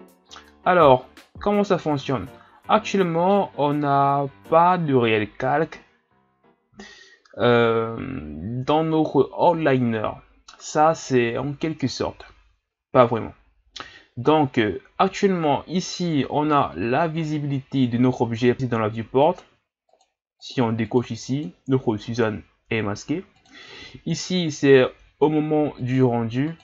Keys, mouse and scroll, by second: 0.2-3.3 middle drag, 19.3 click, 20.0 click, 20.4 click, 20.8 click, 21.5-25.6 drag, 25.9 click.